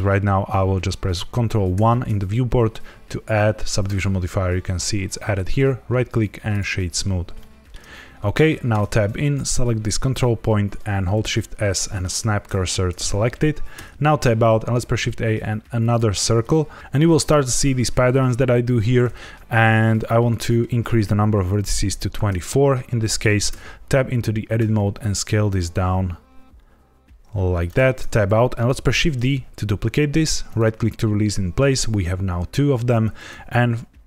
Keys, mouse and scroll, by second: 1.7 ctrl+1, 3.8 click, 5.4 right click, 7.3 middle click, 8.6 Tab, 9.1 click, 11.1 shift+s, 13.7 Tab, 14.3 shift+a, 16.3 middle click, 20.2 click, 23.4 Tab, 24.5 s, 27.5 click, 27.9 Tab, 28.9 shift+d, 30.4 right click.